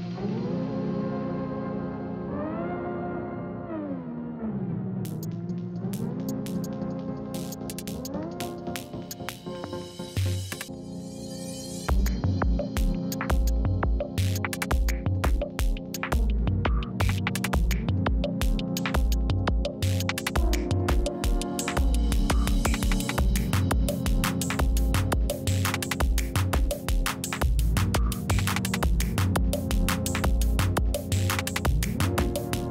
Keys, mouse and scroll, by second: 1.1 click, 2.8 right click, 3.7 click, 3.8 click, 6.5-7.7 typing, 11.5 Right, 12.3-13.6 typing, 14.8 Return, 16.2 click, 17.2 right click, 18.7 click, 20.2 ctrl+v, 21.8 click, 22.1 2, 23.0 click, 23.7 2, 24.7 click, 30.4 click.